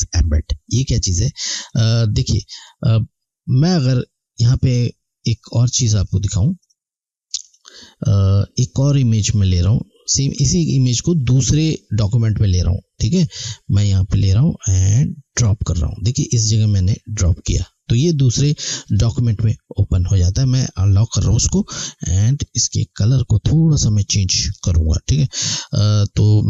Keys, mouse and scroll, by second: 5.4 click, 12.7 click, 18.7 click, 21.6 alt+scroll down 1, 26.3 click.